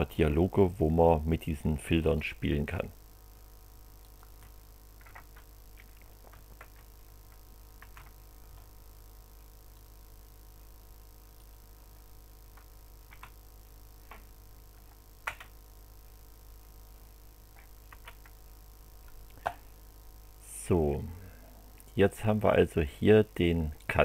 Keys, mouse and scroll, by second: 4.0 click, 6.6 ctrl+a, 7.8 ctrl+c, 9.7 click, 11.4 click, 13.1 ctrl+v, 15.2 Return, 17.9 Return, 20.5-22.4 drag, 23.8 click.